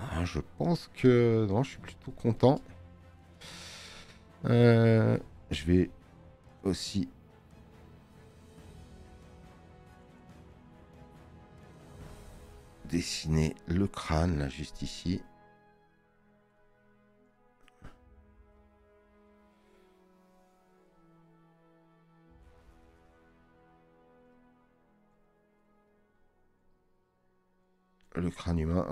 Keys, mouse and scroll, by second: 0.5 middle click, 2.5 space, 2.7 click, 4.5 space, 4.5 click, 5.9 scroll up 1.